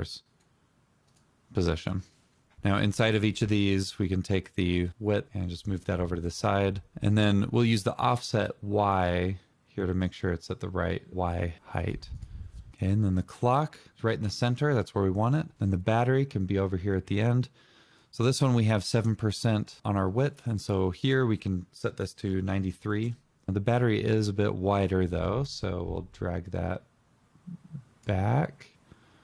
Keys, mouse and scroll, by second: 1.5 double click, 21.5 typing, 22.0 Return.